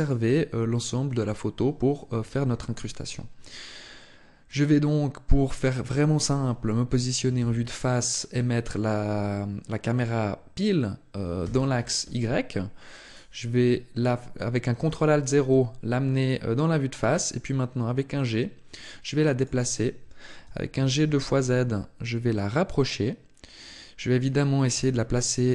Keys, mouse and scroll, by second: 7.2 KP_1, 12.8 right click, 15.1 g, 19.2 click, 20.2 g, 23.5 click, 24.6 g.